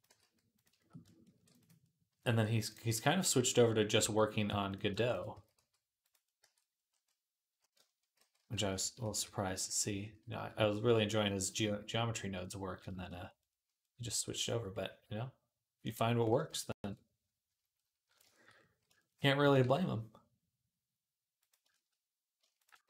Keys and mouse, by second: 1.1 ctrl+r, 1.6-3.6 middle drag, 1.9 s, 3.1 Tab, 3.8 Tab, 5.1 s, 6.0 middle click, 6.2 Tab, 7.2-10.8 drag, 8.0 ctrl+z, 8.2 ctrl+z, 8.4 ctrl+z, 8.6 ctrl+z, 8.8 ctrl+z, 9.0 ctrl+z, 9.3 ctrl+z, 9.5 ctrl+z, 9.7 ctrl+z, 9.9 ctrl+z, 10.1 ctrl+z, 10.4 ctrl+z, 10.6 ctrl+z, 10.8 middle click, 11.9-14.1 middle drag, 14.2 middle click, 16.7 ctrl+KP_Add, 17.6 middle click, 19.2 g, 21.5 shift+click, 21.8 middle click, 22.2 alt+shift+click, 22.5-22.8 alt+shift+middle drag, 22.7 s.